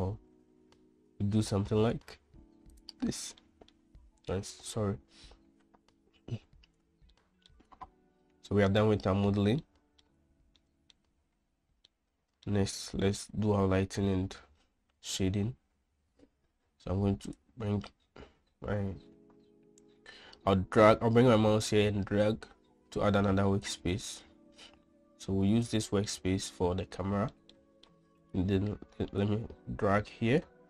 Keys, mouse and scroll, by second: 4.0 middle click, 5.5 Tab, 7.7-8.1 shift+middle drag, 9.2-9.8 middle drag, 10.2-10.6 shift+middle drag, 11.1-11.5 middle drag, 12.4-13.0 middle drag, 18.0 click, 18.6-20.2 middle drag, 20.2-24.2 drag, 26.7-27.9 shift+middle drag, 28.1-28.4 middle drag, 29.8-30.6 drag.